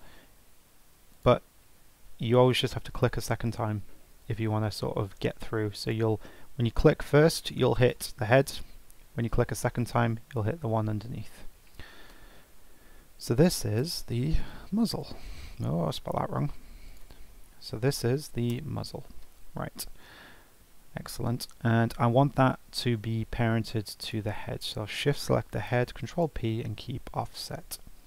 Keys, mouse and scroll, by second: 1.1 click, 2.4 click, 5.8-7.9 drag, 9.7 click, 12.3 F2, 14.5 e, 16.0 F2, 24.0 shift+click, 25.5 ctrl+p.